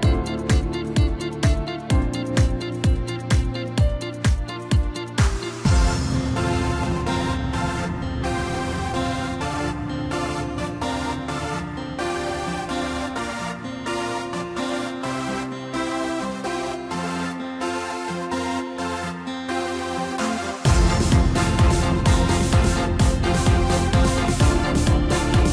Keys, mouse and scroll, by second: 0.3 click, 0.4 click, 0.7-1.0 scroll down 3, 1.0-2.2 middle drag, 2.2 e, 3.4 s, 7.1 scroll up 1, 7.3 scroll down 1, 7.5 middle click, 8.2 scroll up 1, 8.8 click, 9.2-10.4 middle drag, 10.4 i, 12.2-13.3 middle drag, 13.3 e, 15.3 scroll up 3, 15.5 scroll down 3, 15.7-17.1 middle drag, 17.1-17.4 scroll down 2, 17.4-18.7 middle drag, 18.7-19.2 scroll up 1, 19.3 g, 21.7-22.1 scroll up 1, 22.1-23.6 middle drag, 23.6 shift+d, 25.0 s.